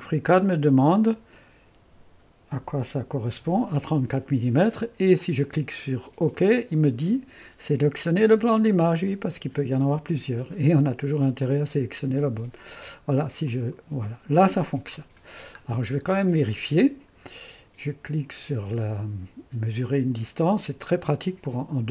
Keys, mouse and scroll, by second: 0.9-2.5 drag, 2.5 3, 3.3 4, 6.3-7.4 drag, 11.4-13.1 drag, 13.5-14.9 drag, 14.9-17.0 scroll up 2, 19.8-21.8 drag, 21.8-21.9 scroll up 2.